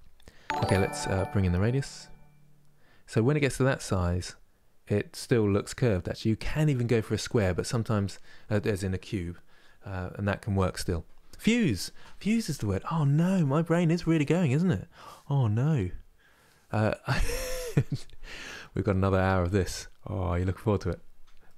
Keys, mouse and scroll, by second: 0.5-3.4 drag, 3.4-21.5 middle drag.